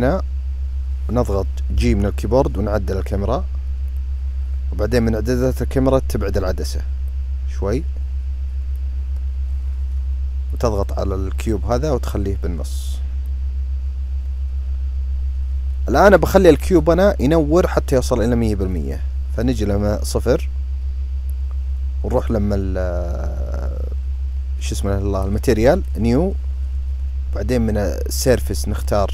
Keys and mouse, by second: 1.4 g, 3.6 typing, 6.9-8.6 drag, 10.2 typing, 11.3 click, 13.6 typing, 18.4-19.2 drag, 28.1-29.1 drag.